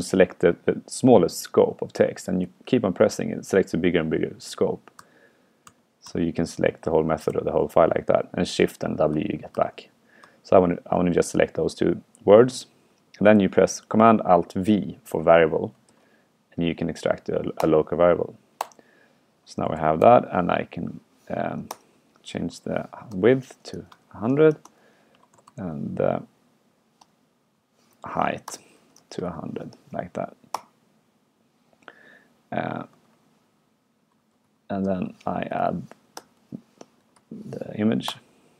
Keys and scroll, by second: 2.5 super+w, 3.9 super+w, 4.9 super+w, 5.1 super+w, 5.7 super+w, 6.1 super+w, 6.1 super+w, 7.4 shift+super+w, 9.7 shift+super+w, 10.3 shift+super+w, 15.9 alt+super+v, 33.1 alt+8.